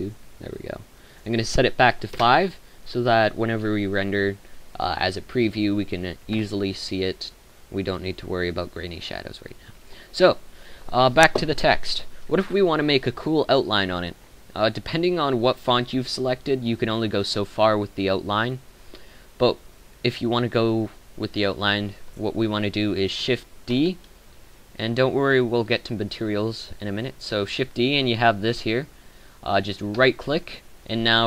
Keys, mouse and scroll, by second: 0.0 Escape, 6.3 F12, 6.3 Escape, 23.6 shift+d.